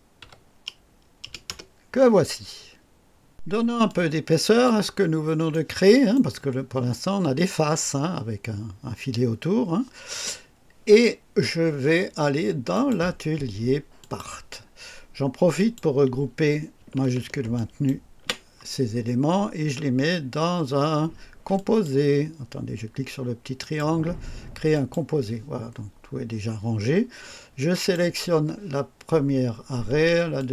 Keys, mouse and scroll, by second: 0.1 KP_8, 1.1-1.6 typing, 1.4 Return, 3.8 click, 4.8-5.1 scroll up 1, 5.4 right click, 12.6 click, 13.9 click, 15.5 click, 17.4 shift+click, 21.5 click, 23.5 click, 24.6 click, 27.6 click, 30.3 ctrl+click.